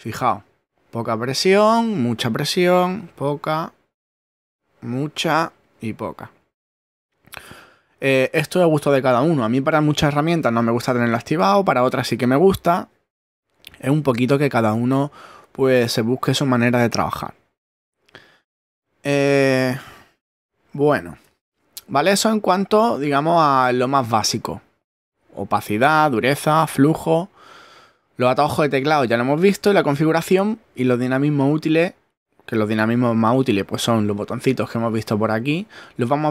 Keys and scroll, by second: 20.9 ctrl+Tab.